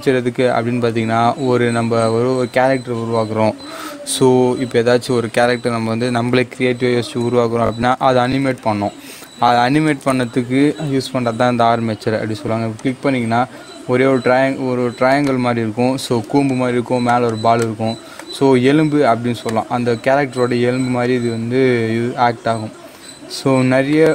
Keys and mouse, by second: 12.7 click, 15.2-24.1 drag.